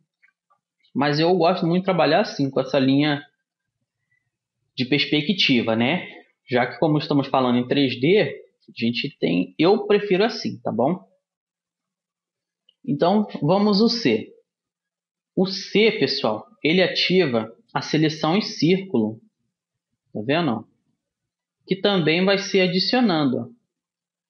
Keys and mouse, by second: 1.8-7.4 middle drag, 7.8-12.2 middle drag, 10.4 a, 17.2 c.